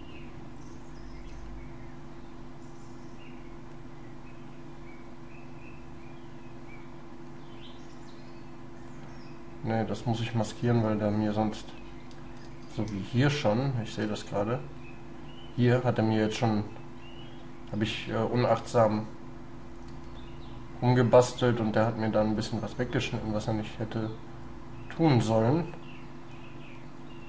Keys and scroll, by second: 12.9 space.